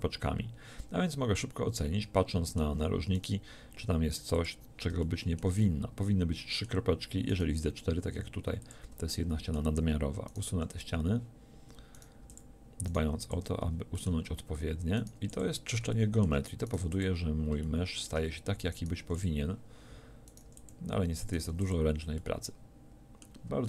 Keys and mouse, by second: 3.1 click, 3.6 x, 7.3 click, 8.1 x, 10.5 x, 12.2 x, 13.1 x, 15.2 x, 16.8 x, 19.0 x, 20.5 x, 21.5 x.